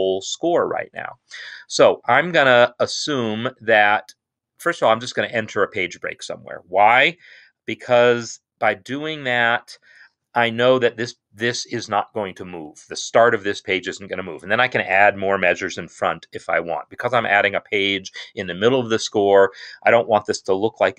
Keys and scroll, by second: 9.2 ctrl+Return.